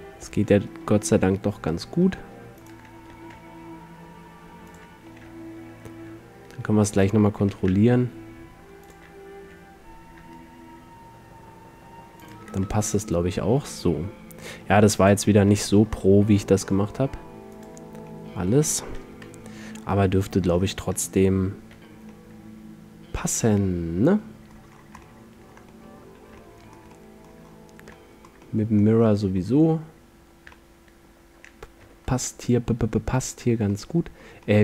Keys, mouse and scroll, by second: 2.8-4.7 drag, 3.2 g, 4.9-6.7 drag, 5.2 r, 7.0-8.8 drag, 7.6 g, 9.5 r, 12.4-14.4 drag, 12.8 g, 15.2-17.2 drag, 15.5 r, 17.8-18.2 drag, 18.2-19.2 middle drag, 19.2 KP_Decimal, 21.8 z, 24.1 middle drag, 24.9-28.8 middle drag, 30.4-32.6 middle drag, 32.0 z, 33.4-34.6 middle drag.